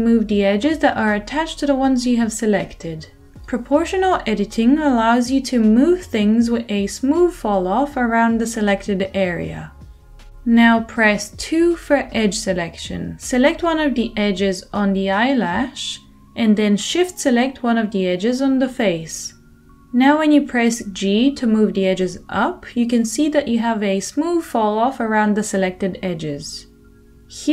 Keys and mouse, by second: 10.9 2, 13.0-17.6 middle drag, 17.6 shift+click, 17.7-19.8 shift+middle drag, 19.8-27.5 drag, 20.1 g.